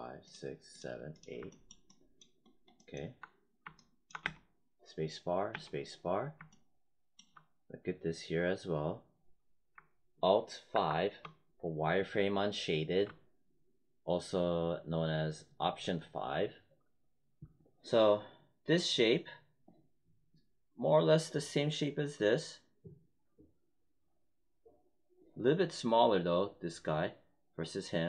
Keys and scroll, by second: 4.1 space, 5.4 space, 10.6 alt+5.